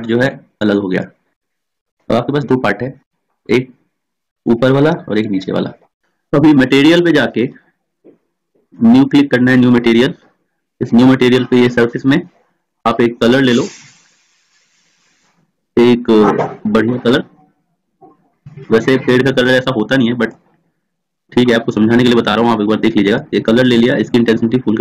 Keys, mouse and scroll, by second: 0.3 click, 2.6 ctrl+z, 3.8-5.1 drag, 8.9-24.8 drag.